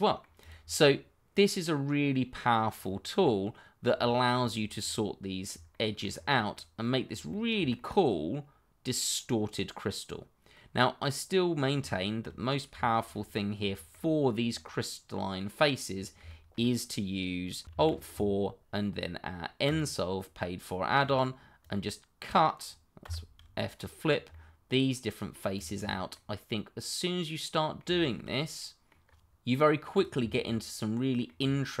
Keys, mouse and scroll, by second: 0.4 click, 0.6 scroll down 1, 0.9 middle click, 2.7-3.1 scroll up 1, 3.2 middle click, 4.2 shift+middle click, 4.6 scroll down 1, 4.8 middle click, 5.8 shift+middle click, 6.1-6.5 scroll up 1, 6.5 middle click, 7.4 shift+middle click, 7.9 middle click, 12.0 shift+middle click, 12.8 middle click, 13.2-13.7 scroll up 1, 13.7 shift+middle click, 13.7 middle click, 13.9 shift+middle click, 14.5 middle click, 15.9-16.2 scroll down 1, 16.2 shift+middle click, 19.6 click, 23.0 click, 24.3 middle click, 25.6 click, 25.8-26.1 scroll down 1, 26.1 middle click, 29.0-29.3 scroll up 1, 29.3 click, 31.1 middle click, 31.7 click.